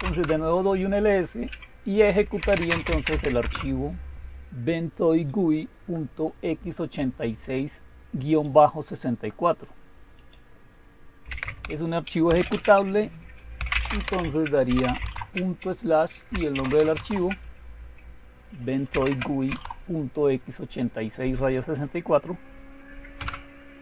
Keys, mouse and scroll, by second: 0.0-0.1 typing, 2.1-3.6 typing, 5.3-8.4 drag, 10.2 click, 11.3-12.2 typing, 13.5-15.3 typing, 16.5 shift+g, 16.9 Tab, 18.9-20.4 typing, 19.5 Tab, 23.1 Return.